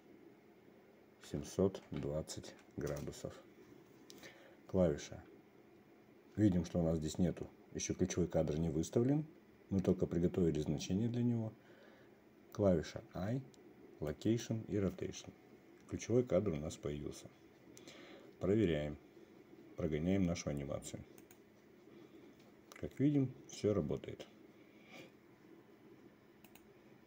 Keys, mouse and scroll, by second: 13.6 i, 21.8 click.